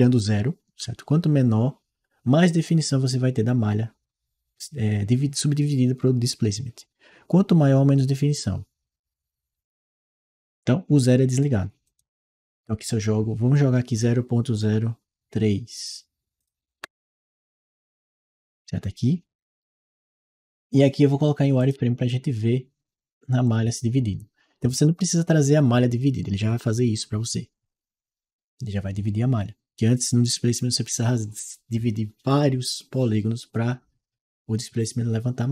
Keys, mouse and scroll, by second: 11.7 click, 16.2 click, 16.6 3, 21.4-25.6 drag.